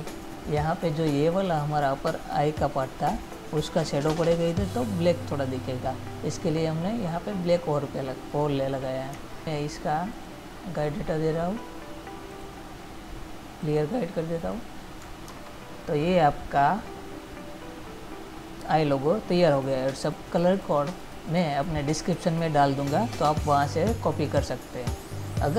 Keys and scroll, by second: 15.6 ctrl++.